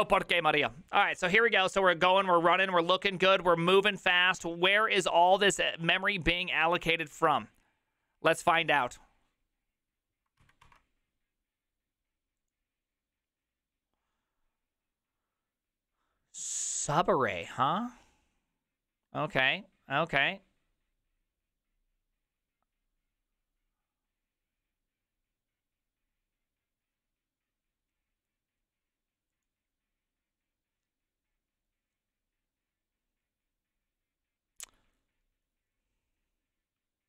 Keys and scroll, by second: 10.7 alt+{, 10.7 alt+[.